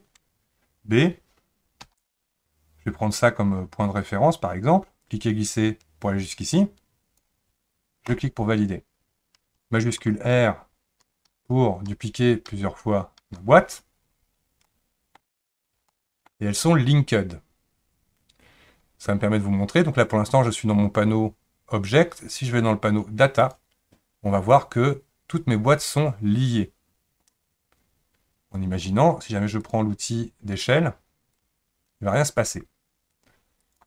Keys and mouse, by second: 11.3 shift+r, 11.9 shift+r, 12.5 shift+r, 13.2 shift+r, 14.6-15.2 middle drag, 15.9-22.2 shift+middle drag, 29.6 click, 31.3-33.6 drag.